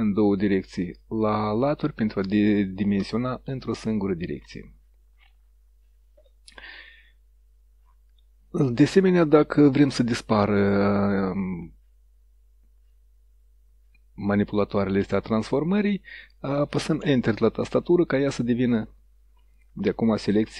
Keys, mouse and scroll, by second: 1.6-3.5 drag, 4.2 click, 17.1 Return.